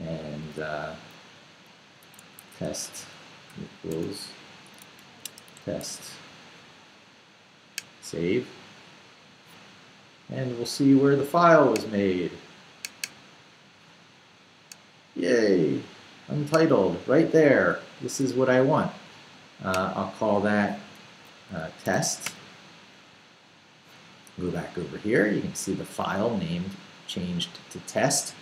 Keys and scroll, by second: 1.9-6.5 typing, 21.3-22.4 typing.